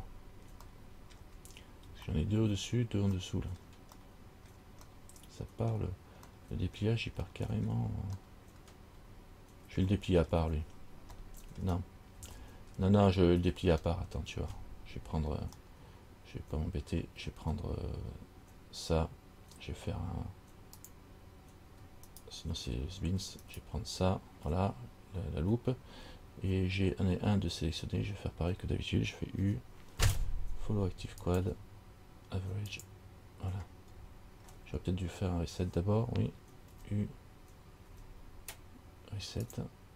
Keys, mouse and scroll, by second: 0.9 shift+middle click, 2.3 shift+middle click, 3.4 shift+middle click, 4.2 shift+middle click, 5.1 shift+middle click, 6.5 shift+middle click, 7.5 shift+middle click, 8.4 shift+middle click, 10.1 shift+middle click, 11.5 shift+middle click, 12.6 shift+middle click, 13.2-14.5 scroll up 4, 14.5 scroll up 1, 21.0 click, 22.3 alt+right click, 23.7 alt+right click, 29.6 u, 34.1-36.9 scroll down 9, 36.9 u, 38.1 u.